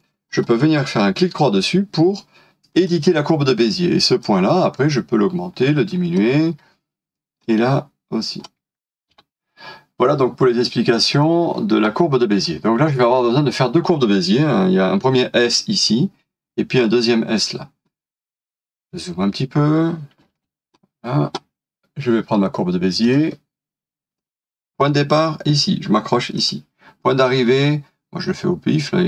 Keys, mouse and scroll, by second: 0.3 right click, 2.8 right click, 9.1 Delete, 12.5 scroll up 1, 18.5-20.2 scroll up 1, 20.3 alt+f.